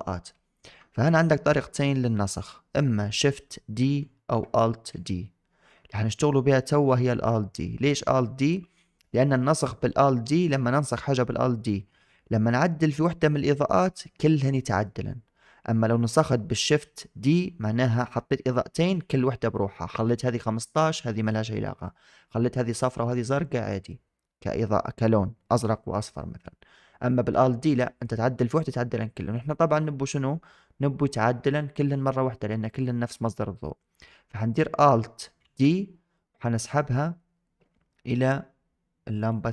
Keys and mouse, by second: 35.3 alt+d.